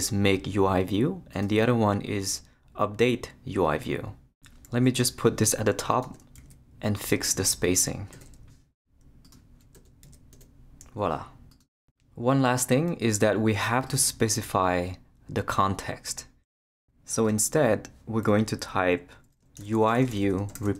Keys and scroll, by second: 6.4 shift+super+x, 7.2 super+x, 8.1 shift+BackSpace, 8.9 BackSpace, 9.7 Return, 10.0 super+v, 10.3 super+Return, 11.1 Return, 19.3-20.7 typing.